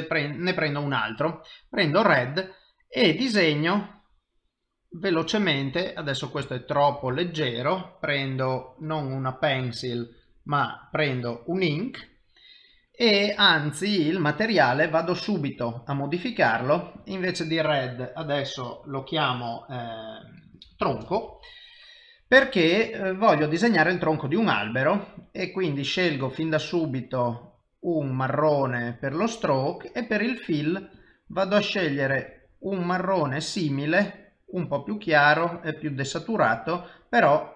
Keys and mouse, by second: 3.4 click, 7.0 ctrl+z, 8.9 click, 14.9 click, 17.0 click, 23.5 click, 26.0 click, 29.3 click, 30.9 click, 36.6 click.